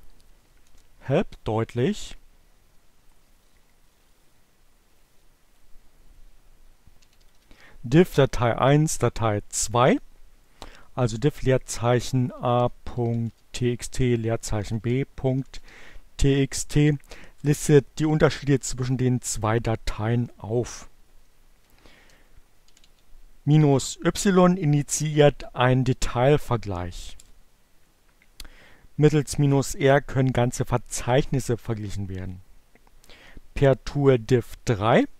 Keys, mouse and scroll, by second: 0.3 p, 0.4 Return, 3.0-5.8 drag, 6.1-7.7 typing, 10.7-15.7 typing, 17.4 Return, 21.0 Up, 21.6-22.4 typing, 27.1 Return.